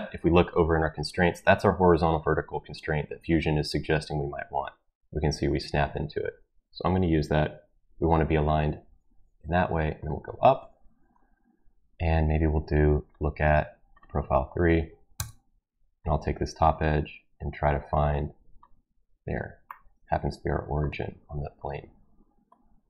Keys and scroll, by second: 15.1 Escape.